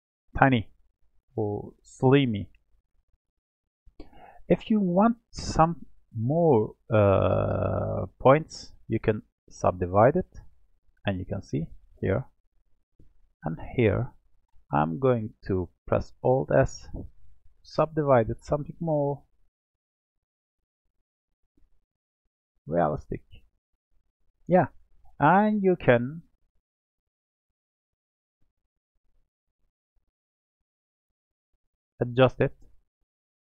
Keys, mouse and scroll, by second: 3.4-4.0 scroll up 4, 4.2-4.6 scroll down 1, 4.6-7.6 middle drag, 9.6-11.8 right drag, 11.8 click, 14.0 shift+click, 16.2-18.7 alt+s, 20.2 click, 21.6 alt+s, 23.4 alt+s, 24.1-26.4 middle drag, 26.4 click, 27.8-29.4 middle drag, 29.4 r.